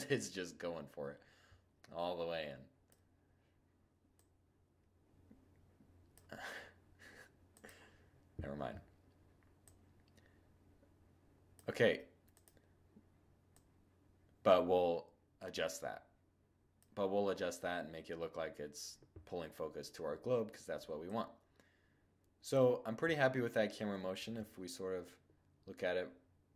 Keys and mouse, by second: 3.2-5.0 drag, 5.0-6.6 middle drag, 6.6-10.5 drag, 10.5 middle click, 11.3-14.6 drag, 20.1-21.9 drag, 21.9-23.4 middle drag, 23.4 shift+z.